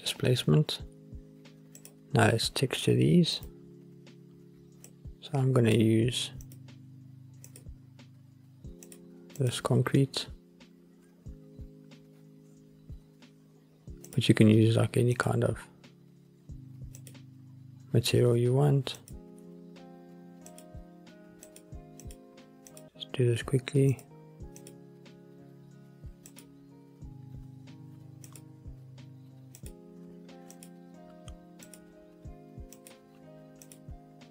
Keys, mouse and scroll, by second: 1.9 click, 3.5-3.8 drag, 7.7-9.1 drag, 9.5-15.5 drag, 17.2 click, 20.9 click, 21.8 click, 23.0-24.1 drag, 26.7 click, 28.4-34.3 drag.